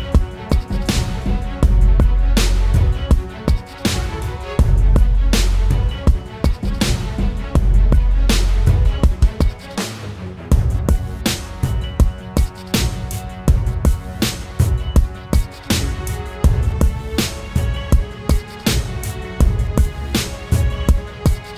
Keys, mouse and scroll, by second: 1.0 alt+click, 7.8 right click, 9.8 double click, 11.1 right click, 13.7 typing, 14.1 double click, 17.3 right click, 19.5 double click.